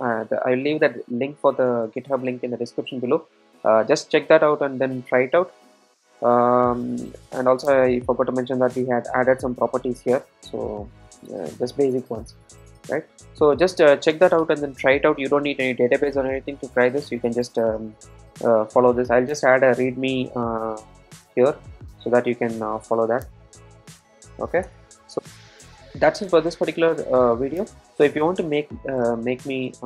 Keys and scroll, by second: 23.2 super+n.